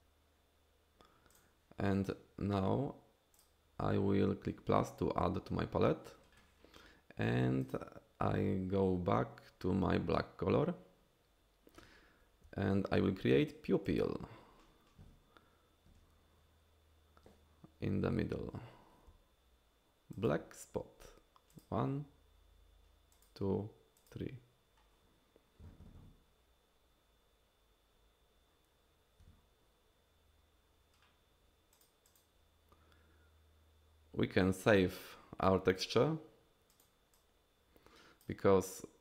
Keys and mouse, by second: 1.4 click, 7.7 click, 12.5 f, 13.9 f, 14.0 f, 19.1 f, 20.2 f, 20.3 f, 20.3 f, 21.5 click, 23.2 click, 24.0 click, 32.3-35.8 drag, 36.7 click, 37.3-39.0 drag.